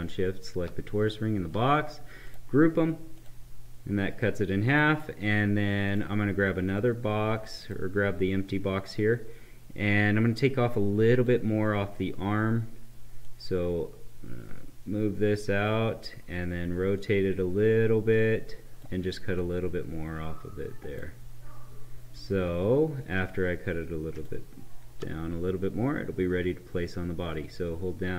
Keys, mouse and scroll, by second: 11.1-24.0 drag.